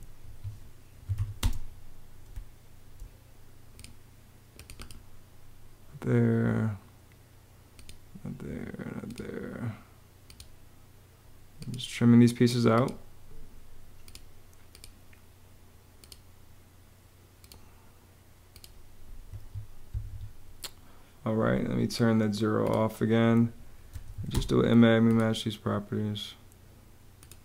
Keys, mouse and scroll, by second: 0.5-1.3 typing, 18.9 Escape, 20.7 Escape, 23.3-24.3 typing.